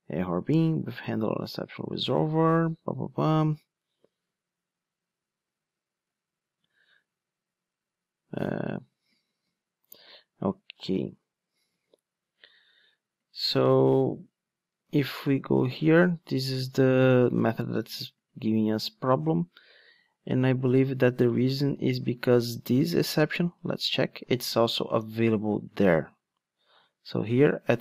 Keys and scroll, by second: 9.8 super+c, 10.8 super+f, 10.9 super+v, 14.9 ctrl+Tab, 15.6 super+f, 15.8 super+v, 24.4 super+c, 25.5 ctrl+Tab.